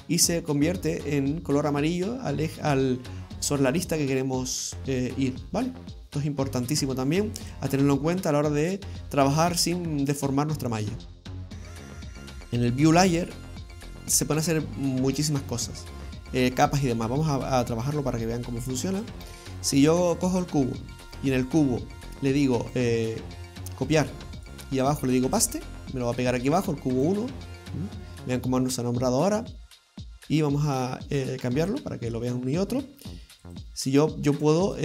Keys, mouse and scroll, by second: 9.3 middle click.